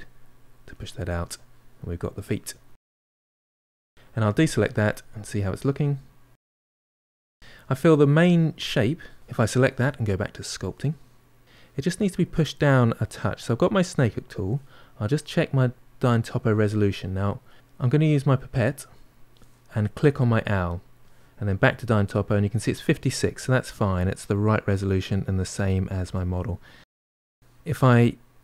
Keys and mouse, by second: 0.5-4.1 middle drag, 4.1 click, 4.3-5.8 middle drag, 7.2-8.4 shift+middle drag, 8.4 click, 11.4-25.1 middle drag, 25.1-26.3 drag, 26.3-27.8 middle drag, 27.8 click.